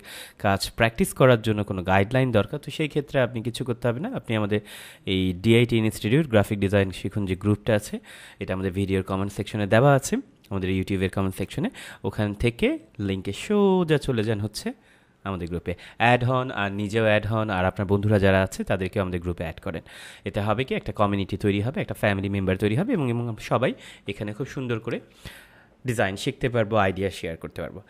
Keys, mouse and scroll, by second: 1.1 scroll up 1, 4.1 scroll up 1, 24.7 click.